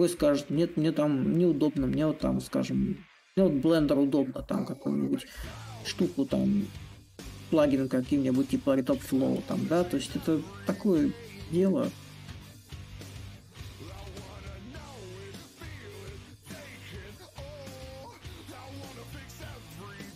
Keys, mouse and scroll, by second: 3.4-5.1 drag, 5.1 shift+middle click, 5.3 shift+click, 5.8-6.8 shift+middle drag, 6.9-9.6 shift+drag, 11.7 a, 12.6 click, 14.2 s, 15.2 click, 20.1 click.